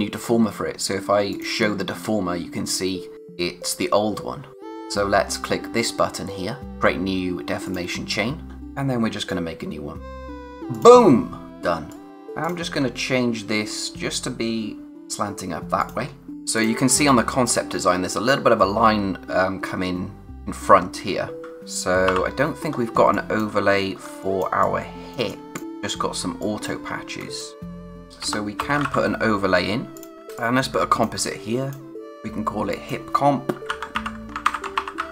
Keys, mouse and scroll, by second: 1.3 click, 7.6 click, 11.5 space, 11.9 click, 12.0 space, 12.1 click, 12.8-13.8 scroll up 1, 13.8 click, 15.8 click, 16.3 scroll up 1, 16.5 click, 17.0 space, 17.1 click, 17.5 space, 21.4 click, 22.1 o, 22.7 scroll up 1, 23.0 space, 23.1 click, 23.6-24.0 scroll down 1, 24.0 space, 24.2 click, 24.5 space, 25.3 click, 26.4 click, 26.8-27.2 scroll up 1, 27.2-30.1 typing, 27.4 click, 27.9 click, 28.2 Return, 29.9 click, 30.4 click, 31.3 click, 33.3-35.1 typing.